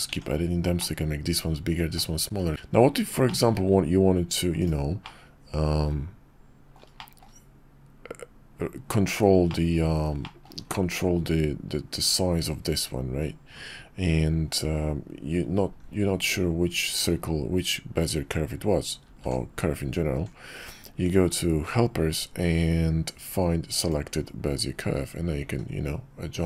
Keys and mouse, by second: 0.1 Tab, 0.8-2.0 drag, 3.2 shift+drag, 4.6 click, 5.1-6.8 middle drag, 7.0 shift+middle drag, 9.5-9.9 middle drag, 10.2 shift+middle drag, 19.0 alt+shift+c, 25.4 s.